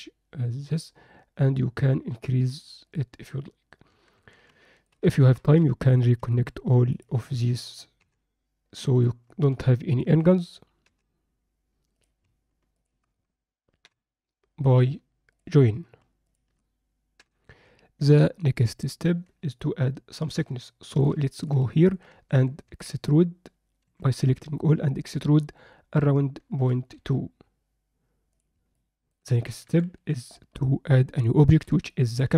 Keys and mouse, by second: 3.9 Tab, 4.1 Tab, 4.7 ctrl+alt+middle click, 5.1 alt+shift+middle click, 5.9 click, 8.0 j, 10.9 j, 11.9 click, 12.7 shift+click, 13.8 j, 15.3 click, 16.2 shift+click, 17.2 j, 19.0 Tab, 19.6-20.3 alt+middle drag, 20.7-21.0 alt+shift+middle drag, 21.3 ctrl+alt+middle click, 21.7 middle click, 22.7 a, 23.9 e, 28.7 middle click, 29.5 Tab, 29.9 KP_7, 31.2-31.5 alt+shift+middle drag, 31.9 ctrl+middle click.